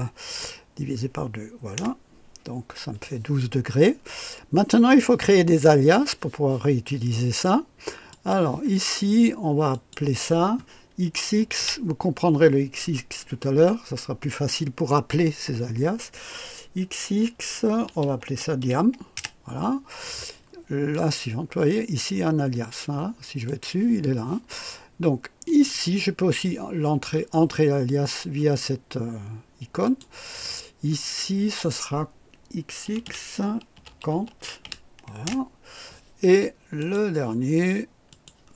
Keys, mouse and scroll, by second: 1.7-2.8 typing, 8.1 click, 9.7 click, 11.3 x, 17.5-19.1 typing, 20.9 click, 23.2-23.9 typing, 23.4 click, 25.5 click, 29.8 click, 32.8-35.2 typing, 36.8 click, 38.1 click.